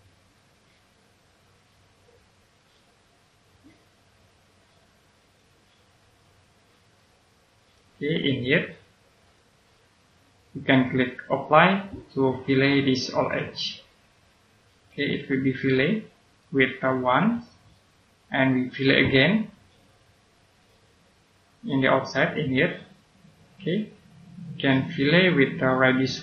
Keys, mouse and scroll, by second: 5.1 click, 6.9 right click, 9.2 click, 13.1 click, 15.1 right click, 20.4 click, 21.3-22.4 scroll up 1, 22.7 click, 23.7-24.7 scroll down 1, 26.0 middle click.